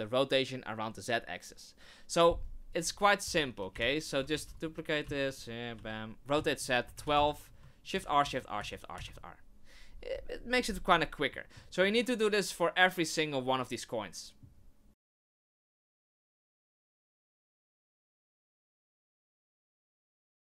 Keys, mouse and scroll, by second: 2.7 right click, 3.7 Right, 4.3 shift+d, 5.0 x, 5.7 r, 7.9 shift+r, 8.2 shift+r, 8.6 shift+r, 8.9 shift+r, 11.3 middle click, 11.9 middle click, 14.9 right click, 15.0 Right, 15.1-20.4 typing, 15.6 Right, 15.6 right click, 16.1 ctrl+z, 16.8 Right, 17.3 right click, 17.6 Right, 17.9 right click, 18.1 Right, 18.8 right click, 18.9 Right, 19.4 right click, 19.4 Right, 19.9 right click, 20.1 Right.